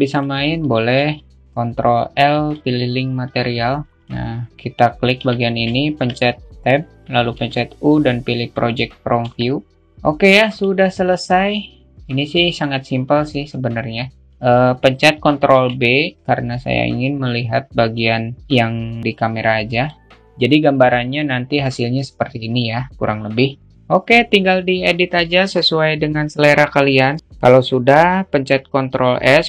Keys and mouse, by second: 1.4 ctrl+l, 5.0-5.4 alt+shift+middle drag, 7.4 u, 9.0 Tab, 10.4 a, 15.1 ctrl+b.